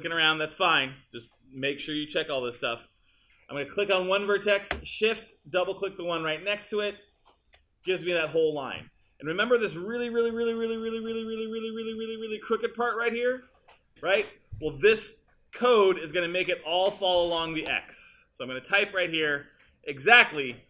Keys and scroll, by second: 20.4-20.6 typing.